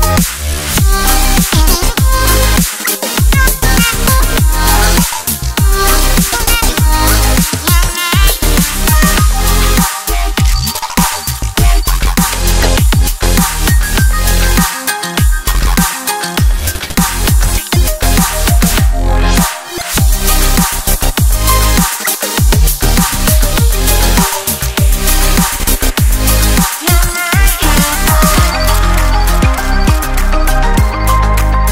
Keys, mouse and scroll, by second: 1.3 1, 3.5 2, 4.3 click, 4.9 shift+click, 5.8 shift+click, 6.3 shift+click, 7.5 shift+click, 7.9 shift+click, 8.5 shift+click, 9.9 x, 12.1 a, 12.8 m, 16.4 Tab, 17.8 KP_3, 19.4 KP_Decimal, 21.0-21.7 scroll down 2, 21.7-24.8 shift+middle drag, 26.6 shift+d, 29.7-31.7 drag.